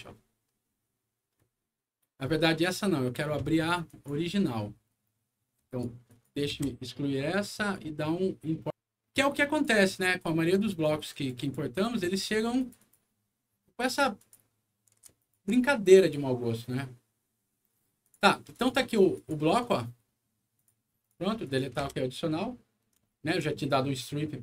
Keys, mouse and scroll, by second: 3.8 click, 5.6 click, 6.0 click, 6.4 Delete, 7.5 click, 9.3 click, 11.0 click, 11.3 click, 12.5 click, 12.7 click, 14.1 click, 15.1 ctrl+click, 15.9 ctrl+click, 18.0 ctrl+click, 18.5 click, 19.1 click, 19.5 right click, 20.5 click, 20.9 click, 21.4 click, 21.7 Delete, 22.2 middle click, 23.0 alt+middle click.